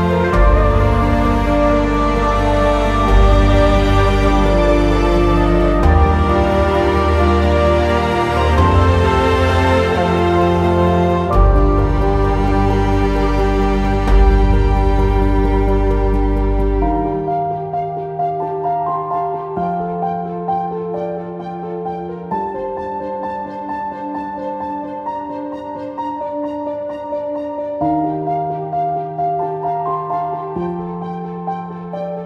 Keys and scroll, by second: 2.7 ctrl+z, 7.6 e, 25.3-26.1 typing.